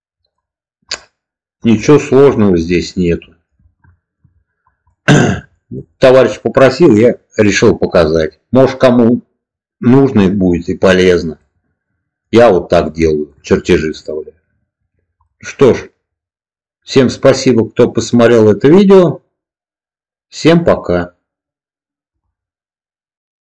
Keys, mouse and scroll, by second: 0.9-1.5 middle drag, 2.2-3.4 middle drag, 3.8 shift+middle click, 4.8-5.1 middle drag, 5.4 shift+middle click, 5.8 middle click, 11.3-12.1 middle drag, 12.9 shift+middle click, 15.2 middle click.